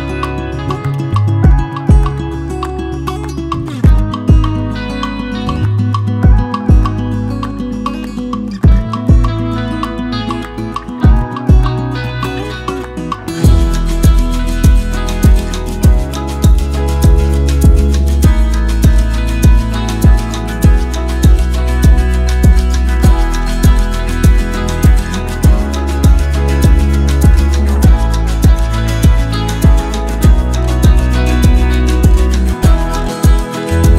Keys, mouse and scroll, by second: 20.9-33.9 ctrl+shift+drag.